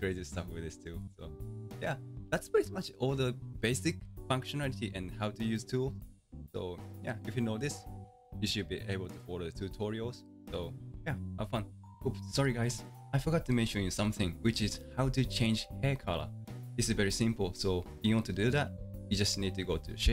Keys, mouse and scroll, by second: 3.3-5.7 scroll down 1, 5.7-8.8 middle drag, 11.9-20.1 shift+middle drag.